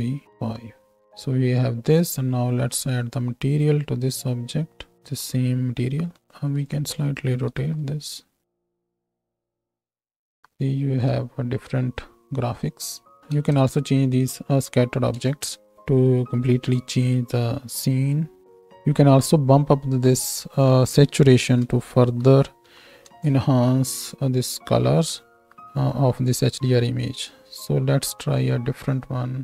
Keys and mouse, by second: 0.7 z, 6.6 middle click, 6.6 right click, 7.4 r, 9.0 g, 9.8 ctrl+space, 10.4 shift+Right, 10.5 shift+Left, 11.3 space, 13.2-20.2 middle drag, 13.2 space, 13.6 space, 15.2 space, 20.2-29.4 drag.